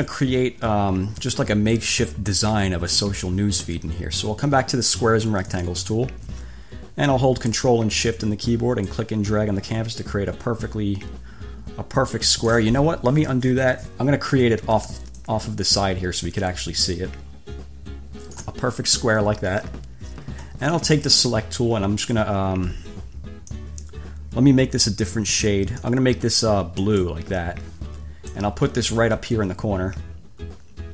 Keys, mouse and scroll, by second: 5.7 click, 9.1-12.9 ctrl+shift+drag, 13.5 Delete, 15.4-18.8 ctrl+shift+drag, 21.3 click, 23.7-26.3 drag, 27.1 click, 28.5-30.9 drag.